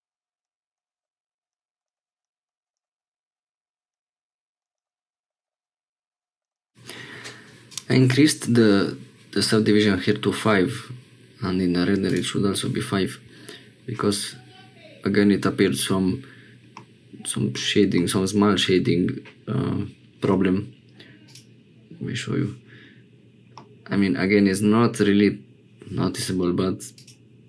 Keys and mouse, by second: 0.4 click, 1.0 s, 1.5 click, 2.2 click, 3.3 click, 3.9 click, 4.7 shift+middle click, 5.4 ctrl+p, 6.4 shift+middle click, 12.0 click, 16.7 middle click, 17.9-19.6 middle drag, 21.2 click, 23.5-25.3 middle drag.